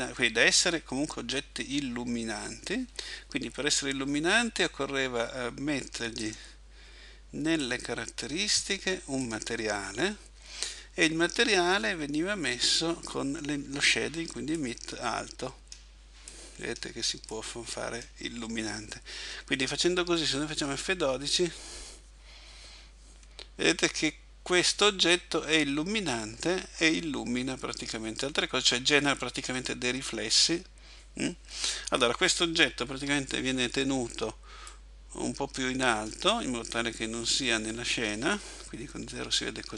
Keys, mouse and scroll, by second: 0.0 click, 6.3 click, 7.7 click, 14.6 click, 33.1 Escape, 34.7 click, 39.1 KP_0.